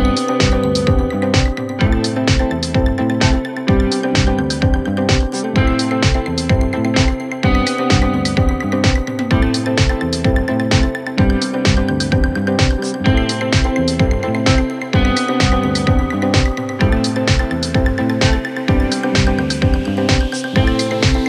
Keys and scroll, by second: 21.0 Delete.